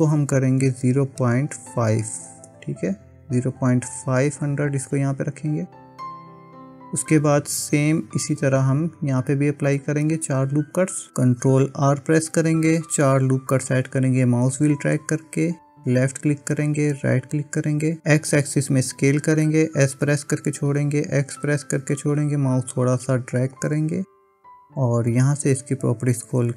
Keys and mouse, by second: 6.6 click, 11.9 ctrl+r, 20.1 s, 25.3 click, 26.3-26.5 drag.